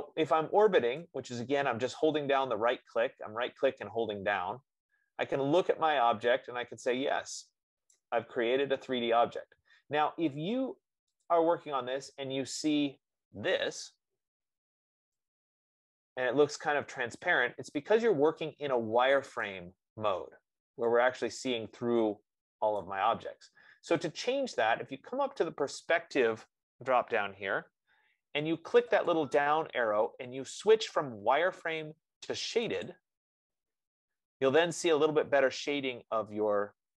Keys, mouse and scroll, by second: 1.4 right click, 1.4 scroll, 2.1 middle click, 6.6-6.9 scroll, 8.3 right click, 8.9 middle click, 11.6 click, 13.3 click, 15.0 middle click, 19.7 right click, 20.4 middle click, 20.6 middle click, 23.2 right click, 29.7 click, 33.4 click.